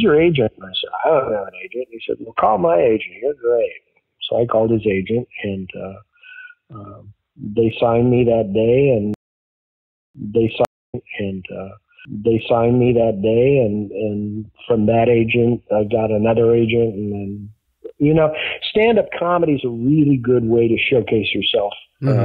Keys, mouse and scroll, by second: 0.8 click, 2.0 click, 7.5-9.1 drag, 9.0 space, 9.8 ctrl+shift+Delete, 10.1 space, 10.6 space, 10.8 click, 10.8 space, 12.9 ctrl+s, 14.0-16.1 drag, 16.5 click, 18.0-19.2 drag, 19.5 click, 20.1 click, 20.9-22.2 drag.